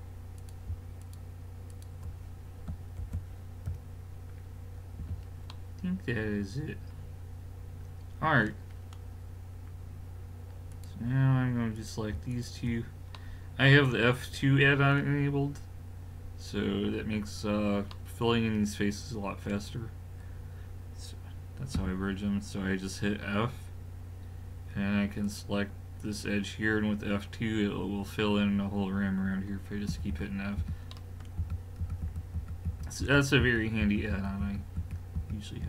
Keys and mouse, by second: 0.4-3.6 drag, 3.0 alt+m, 5.0 a, 8.7-10.7 middle drag, 10.7-13.1 drag, 13.1 middle click, 21.8 f, 25.3 click, 29.9-35.6 typing.